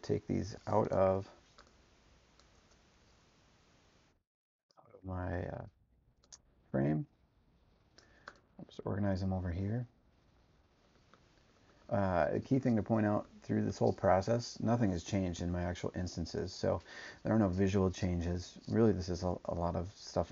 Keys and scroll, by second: 1.0 BackSpace.